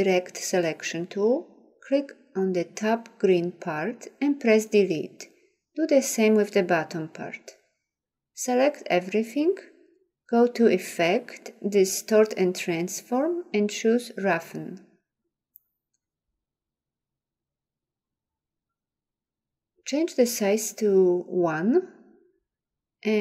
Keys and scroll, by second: 5.2 Delete, 6.9 Delete.